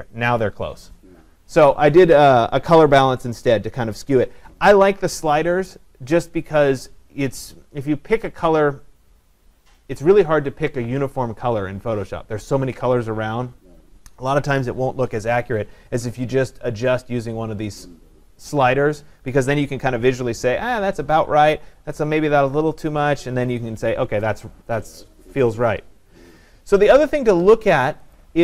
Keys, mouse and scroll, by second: 21.9 click, 23.0 click, 28.2 click.